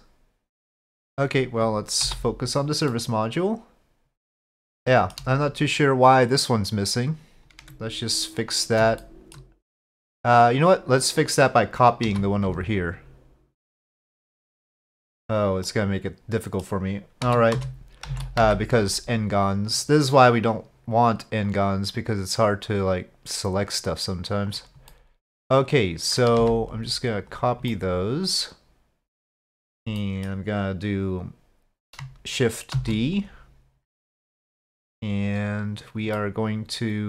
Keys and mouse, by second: 3.0-4.6 middle drag, 4.8-5.2 shift+middle drag, 7.6 Tab, 9.0 shift+middle click, 12.1 3, 12.6 alt+click, 13.9 alt+click, 15.7 middle click, 17.3 z, 18.1 alt+a, 18.4 c, 24.9-26.2 middle drag, 26.4 c, 27.7-29.4 middle drag, 30.0 middle click, 32.8 shift+d, 36.2-37.0 middle drag.